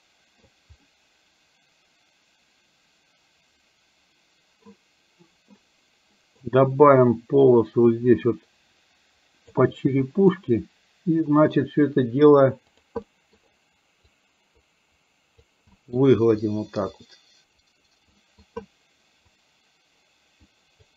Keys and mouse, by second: 0.3 middle click, 1.0-4.7 middle drag, 6.2 middle click, 7.1-9.6 drag, 9.8 middle click, 13.2 middle click, 14.1-15.5 drag, 15.8 middle click, 16.5-18.0 drag, 18.2 middle click, 19.3-20.8 drag.